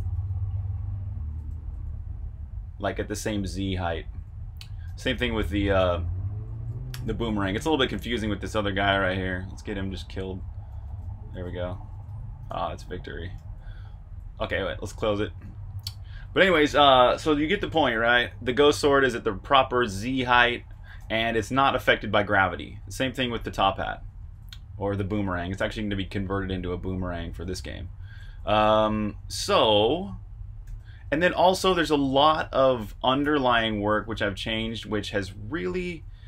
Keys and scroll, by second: 0.0-15.0 typing, 15.8 super+r, 16.0-16.9 typing, 20.7-36.2 typing.